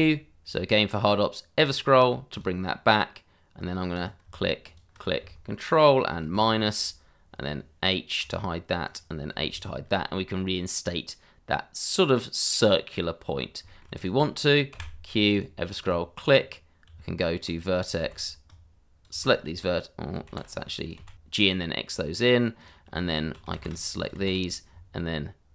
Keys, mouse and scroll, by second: 1.5 click, 4.6 shift+click, 4.7 click, 4.7 shift+click, 6.2 ctrl+KP_Subtract, 8.2 h, 8.8 click, 9.3 h, 9.8 scroll down 1, 13.3 scroll up 1, 13.6 shift+middle click, 13.9 click, 14.7 q, 15.3 click, 15.9 double click, 16.3-16.8 scroll up 1, 16.8 Tab, 18.0 shift+z, 18.4 click, 19.2 shift+z, 20.2 shift+z, 20.5 click, 20.9 shift+z, 21.1 x, 22.5 click, 23.5 shift+z, 23.7 click, 24.1 shift+z.